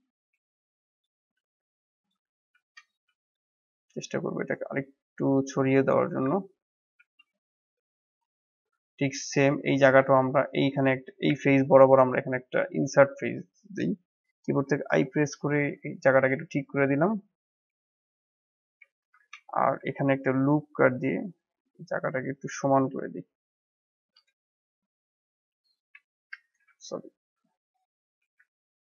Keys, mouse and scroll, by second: 0.9 click, 1.3 a, 1.9 click, 2.5 shift+z, 2.9 click, 3.6 s, 5.7 scroll up 1, 6.0 Tab, 6.5-6.9 middle drag, 6.9 shift+z, 7.2 scroll down 4, 7.6-8.1 middle drag, 8.1 scroll up 1, 8.4-8.9 middle drag, 8.9 scroll up 2, 9.2-11.3 shift+middle drag, 11.3 Tab, 12.2 click, 12.5 click, 12.9 click, 14.6 i, 15.4 middle click, 16.1 Tab, 16.6-18.9 middle drag, 18.9 Tab, 19.5 ctrl+r, 26.0 Escape, 26.6 ctrl+z, 27.1 ctrl+z, 28.7 middle click.